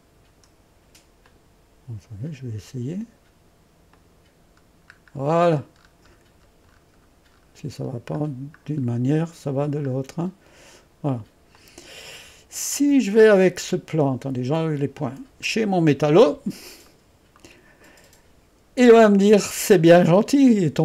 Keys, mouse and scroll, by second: 1.3 click, 4.0 click, 4.7-6.0 scroll down 2, 8.8-11.6 scroll down 1, 11.6 click, 12.5-14.1 scroll down 1, 14.6 click, 17.0-20.8 middle drag.